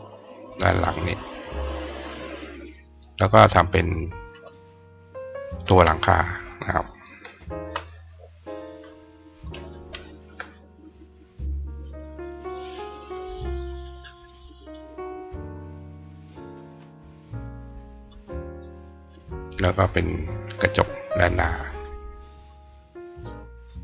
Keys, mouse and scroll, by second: 2.7 click, 3.2-13.8 drag, 14.6 click, 15.1-17.9 drag, 18.3 click, 18.8 right click, 19.3 click, 20.1-21.1 drag, 21.4 click, 22.0-23.8 drag.